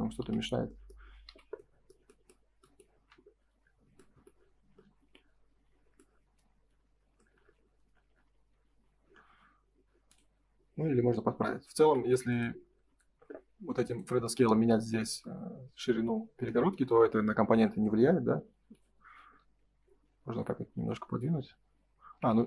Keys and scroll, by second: 3.2 ctrl+s, 11.7 ctrl+s, 22.2 Escape.